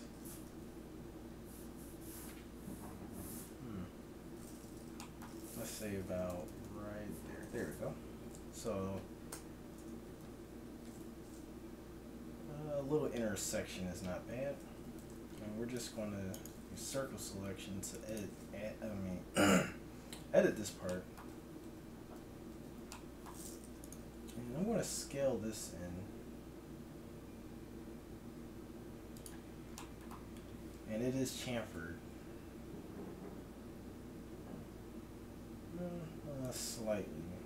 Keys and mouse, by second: 0.5 z, 4.4-6.0 middle drag, 6.0 g, 6.4-9.2 middle drag, 9.3 Tab, 9.7 Tab, 14.7 a, 15.1 c, 16.7 g, 18.4-21.4 middle drag, 21.4 a, 21.7 a, 22.6 z, 24.7 s, 31.7 ctrl+b, 36.8 Tab.